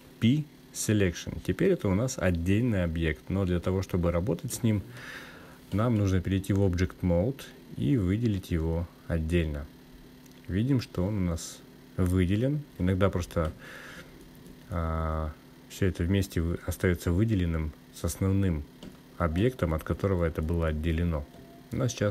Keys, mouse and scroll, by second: 1.4 p, 8.5 Tab.